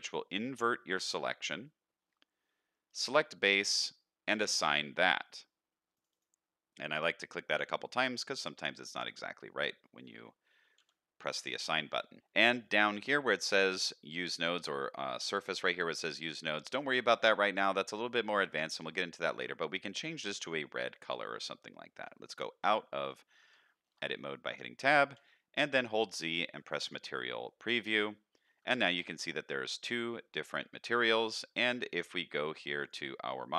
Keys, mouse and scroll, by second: 0.2 middle drag, 2.9 click, 4.2 click, 5.9 click, 6.1 click, 10.7 n, 12.2-13.2 scroll down 5, 12.2 n, 12.2 t, 14.3 click, 15.1 drag, 16.1-16.5 scroll down 2, 18.2-19.4 scroll down 1, 19.4 click, 19.4 scroll down 1, 21.3 middle click, 22.6 Tab, 23.1 middle click, 23.6 shift+middle drag, 24.1-24.9 middle drag, 25.1 z, 27.4-27.9 middle drag, 28.3 middle drag, 28.7 shift+middle click, 32.8 click.